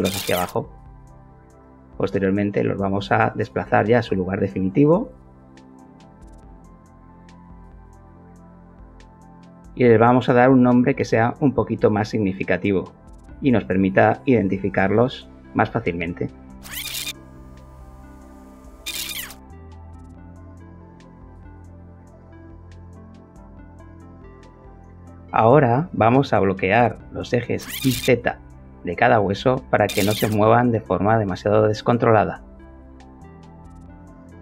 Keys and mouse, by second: 0.0-0.5 typing, 0.0 shift+middle click, 0.1 Escape, 0.2 KP_Subtract, 0.2 shift+middle click, 0.4 Escape, 1.8 z, 4.8 KP_1, 6.1 Return, 6.7-9.5 shift+middle drag, 9.5 shift+click, 12.1 click, 12.8 click, 13.2 click, 14.3 shift+a, 16.7-19.2 typing, 16.8 Return, 17.0 click, 17.3 click, 17.5 Return, 17.7 click, 17.8 click, 18.0 Return, 18.2 click, 18.8 Return, 19.0 click, 19.5 ctrl+t, 21.1 click, 23.3 click, 25.9 click, 26.8 click, 27.6 click, 28.3 click, 28.7 click, 29.4 click, 29.6 click, 29.7 click, 29.8 click, 30.0 ctrl+l, 30.3 g, 32.1 Escape, 34.0 g.